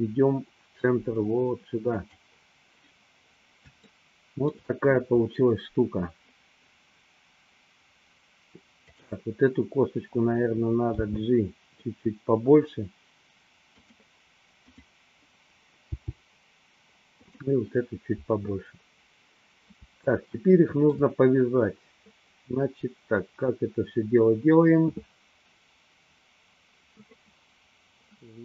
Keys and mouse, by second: 4.0 shift+middle click, 10.9 g, 14.0 click, 16.1 g, 17.5 click, 20.1-21.4 shift+middle drag.